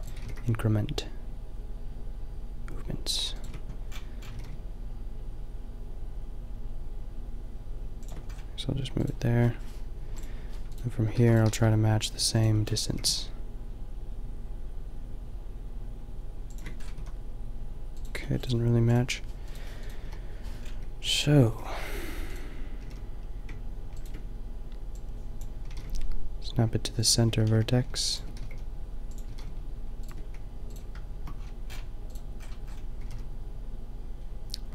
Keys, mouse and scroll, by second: 0.2 g, 3.9-6.6 middle drag, 4.4 g, 10.0 Delete, 10.0 drag, 11.2 shift+d, 11.4 g, 12.7-14.7 drag, 12.8 g, 16.8 middle click, 16.9 a, 18.4 right click, 18.8 Delete, 20.0 Delete, 20.8 drag, 21.1 x, 21.5 g, 22.4-22.9 drag, 22.9 g, 25.6 g, 25.9 click, 27.1 click, 27.4 g, 28.5 g, 28.9 click, 29.3 g, 30.7-32.1 drag, 32.1 middle click, 32.4 click, 33.0 g.